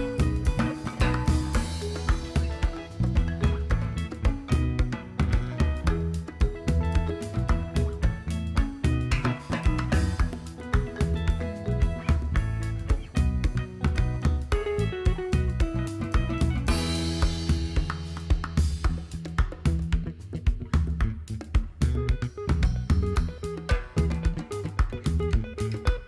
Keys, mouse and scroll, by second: 0.5 right click, 2.0 click, 9.6 click, 10.3-14.7 drag, 22.8 click, 23.1 click.